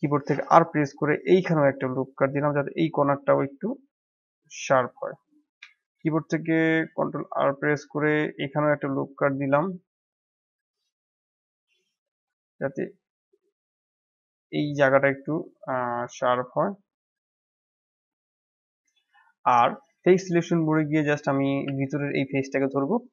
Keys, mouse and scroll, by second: 0.2 ctrl+r, 5.1 middle click, 5.7 ctrl+r, 17.6-19.8 middle drag, 19.8 click, 21.6 shift+z, 22.1 click.